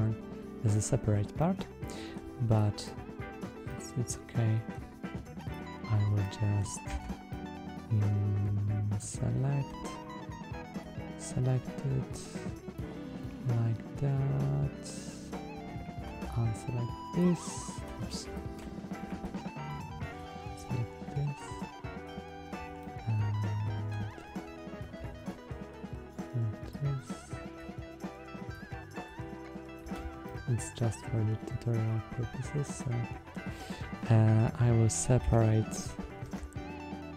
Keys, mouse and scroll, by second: 1.2-2.0 middle drag, 2.5 drag, 3.5-4.6 middle drag, 5.3 click, 6.1 middle click, 6.8 Tab, 7.2-7.9 middle drag, 8.9-9.5 middle drag, 10.7-12.8 drag, 13.0-15.2 middle drag, 16.2-17.1 shift+drag, 18.2 ctrl+z, 19.2-19.7 ctrl+drag, 20.1 ctrl+click, 21.3 ctrl+click, 22.7-23.8 middle drag, 25.1-26.7 shift+drag, 27.5-28.5 shift+drag, 28.9-29.7 shift+drag, 30.1-33.2 middle drag, 35.1 s, 36.1 Escape.